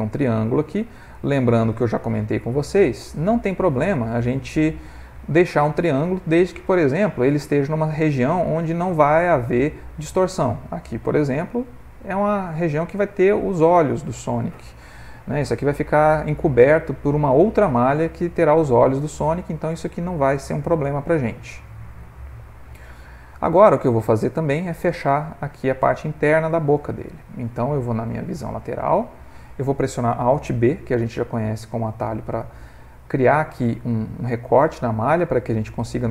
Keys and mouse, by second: 0.0 shift+middle click, 0.7 ctrl+middle click, 3.4 f, 4.1 ctrl+middle click, 4.9 ctrl+middle click, 5.4 ctrl+middle click, 6.1 middle click, 6.9 ctrl+middle click, 7.4 middle click, 9.2 ctrl+middle click, 9.8 middle click, 10.3 middle click, 11.2 middle click, 12.2 Tab, 12.7 middle click, 13.6 middle click, 14.4 middle click, 14.7 ctrl+middle click, 15.1 middle click, 15.5 middle click, 16.1 ctrl+middle click, 16.5 middle click, 19.4 middle click, 21.5 ctrl+middle click, 22.0-23.2 shift+middle click, 22.6 middle click, 22.8 middle click, 23.0 middle click, 25.5 middle click, 28.8 click, 31.0 alt+b, 34.3 middle click.